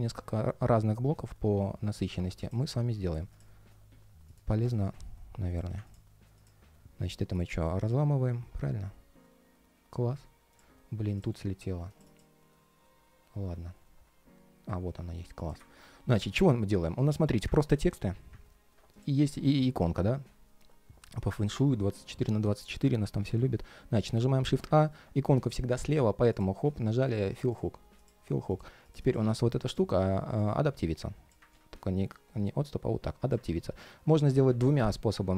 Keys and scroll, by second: 1.7 alt+i, 7.1 shift+super+g, 11.0 ctrl+shift+3, 16.9 ctrl+shift+3, 17.6 ctrl+shift+3, 31.2 super+z, 33.2 super+z.